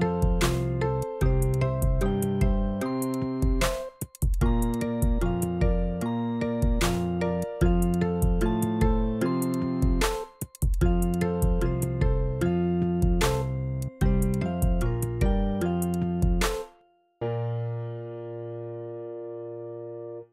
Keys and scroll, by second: 2.8 x, 4.4 super+z, 5.0 ctrl+alt+super+z, 19.1 shift+Up.